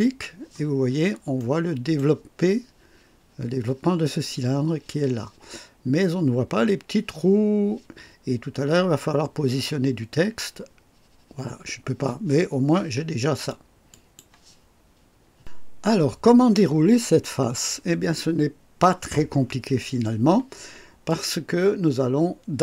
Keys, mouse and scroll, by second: 0.7-1.1 scroll down 1, 1.3-2.1 right drag, 13.9 click, 21.0-22.6 drag.